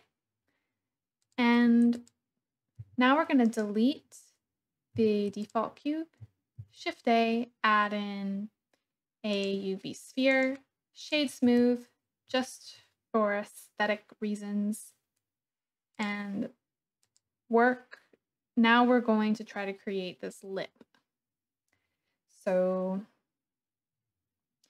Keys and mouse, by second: 1.3 click, 1.9 click, 2.8 c, 4.9 x, 6.5 shift+a, 10.2 click, 11.5 Tab, 12.3 shift+click, 17.0 click.